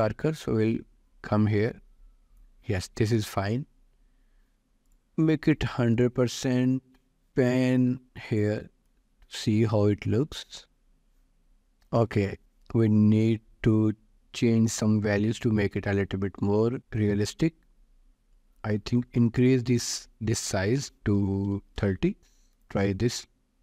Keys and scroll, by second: 21.4 0, 22.1 Return.